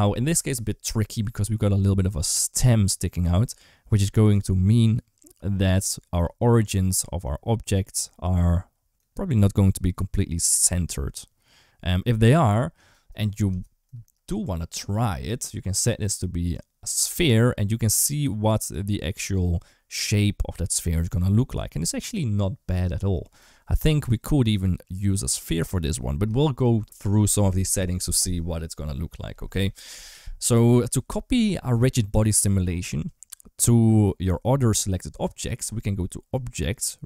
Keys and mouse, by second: 15.8-16.9 drag, 29.6 right click, 30.5 ctrl+s, 36.2-37.0 drag.